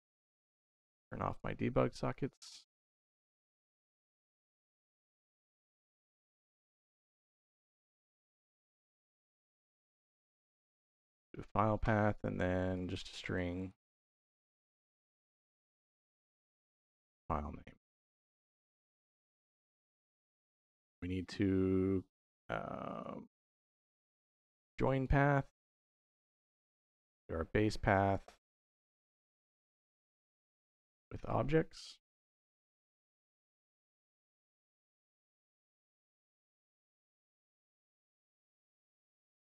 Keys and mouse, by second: 1.1 click, 2.3 middle click, 3.2-4.8 drag, 5.2 middle click, 8.4 click, 9.8-10.9 drag, 11.1 click, 11.9 shift+a, 15.8 click, 17.7-18.8 drag, 19.3 click, 20.0 shift+a, 26.9-28.0 drag, 28.8 click, 29.5 shift+d, 30.2 click, 30.7 click, 30.9-33.8 drag, 34.6-35.9 drag, 36.8-37.7 drag, 39.0-39.5 drag.